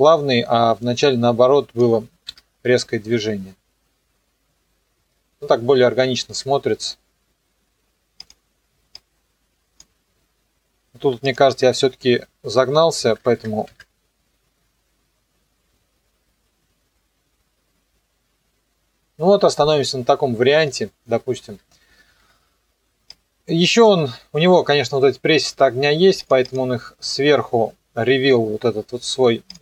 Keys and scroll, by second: 2.3 KP_0, 6.3 KP_0, 13.1 KP_3, 13.2 KP_5, 13.7 KP_Enter, 14.2 KP_0, 21.5 KP_0.